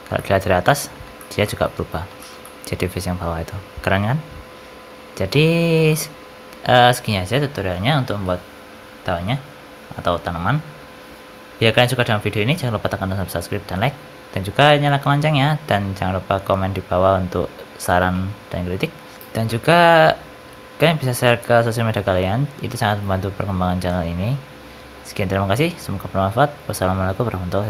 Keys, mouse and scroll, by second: 0.6 shift+middle click, 1.1 shift+middle click, 1.3 middle click, 1.7-2.1 scroll up 3, 2.1 shift+middle click, 2.3 middle click, 5.5 scroll down 4, 5.8 shift+middle click.